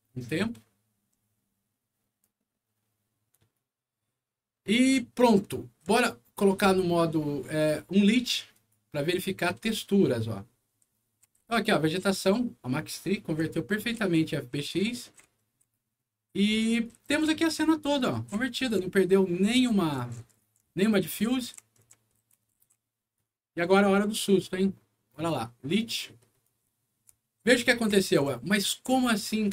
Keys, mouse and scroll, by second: 5.1 right click, 5.3 w, 7.5 click, 8.5 click, 9.4-15.7 right drag, 9.6 w, 10.4 middle click, 10.4 scroll up 1, 11.4 s, 12.0 s, 13.4 w, 14.8 a, 16.8-23.1 right drag, 16.9 s, 17.2 a, 18.2 w, 18.6 d, 20.8-23.0 typing, 24.4 click, 25.0 click, 26.4-28.8 right drag, 26.6 d, 27.4 w, 28.1 a.